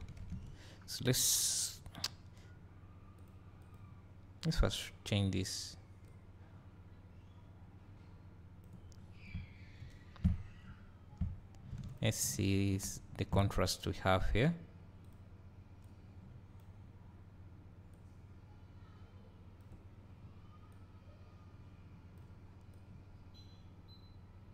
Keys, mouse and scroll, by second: 1.3 click, 3.2 click, 3.8 click, 9.0 scroll down 1, 9.8 `, 10.4 scroll down 2, 11.9 ctrl+shift+click, 14.5 click, 18.1-24.5 drag.